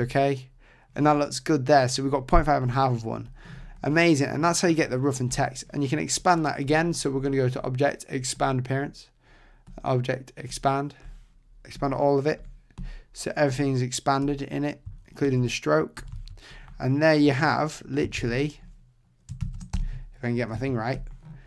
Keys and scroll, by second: 15.2 super+1, 18.2 super+z, 19.4 shift+super+z, 19.7 super+0.